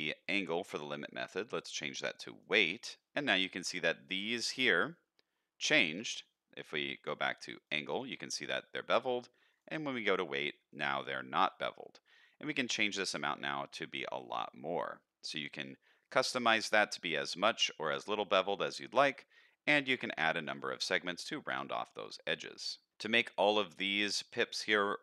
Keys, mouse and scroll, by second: 0.6-2.5 drag, 3.1-3.5 scroll up 1, 3.5 middle drag, 6.7-7.9 drag, 9.5-10.1 drag, 11.4 shift+middle drag, 11.8-12.4 scroll up 1, 12.7-15.4 shift+drag, 16.3 middle click, 17.7 scroll up 1, 18.3-18.9 scroll down 1, 19.8 click, 20.1 click, 20.3 click, 21.1 middle click, 21.9-22.7 middle drag, 23.5-24.0 middle drag, 24.3 shift+middle click, 24.6-25.0 middle drag.